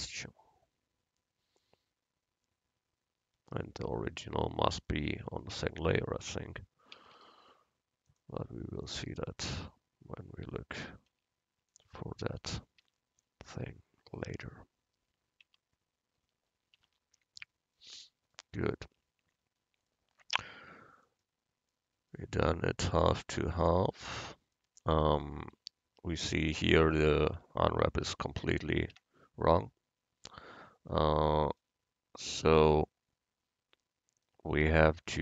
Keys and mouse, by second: 5.0-6.1 right drag, 6.3 Tab, 7.0 a, 7.2 a, 11.1 u, 12.9 Tab, 15.5 Tab, 16.9 Tab, 27.4 Tab, 28.2 Tab, 29.0 Tab.